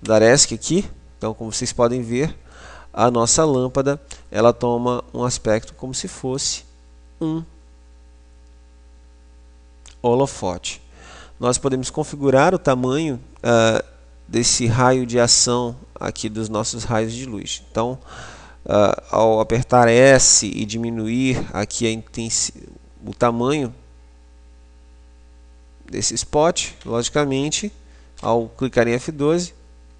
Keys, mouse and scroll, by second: 0.0 Escape, 1.0-3.0 middle drag, 3.5-4.5 middle drag, 6.7 scroll up 1, 6.8-8.7 scroll down 1, 8.7-10.2 scroll up 1, 11.2-11.5 scroll up 1, 11.5 middle click, 12.0-13.3 middle drag, 20.3 s, 26.3 click.